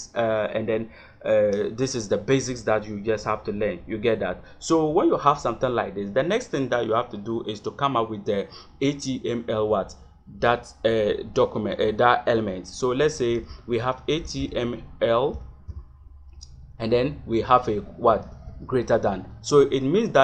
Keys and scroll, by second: 7.0 Return, 13.2 shift+,, 14.2 h, 15.7 l, 18.1 shift+..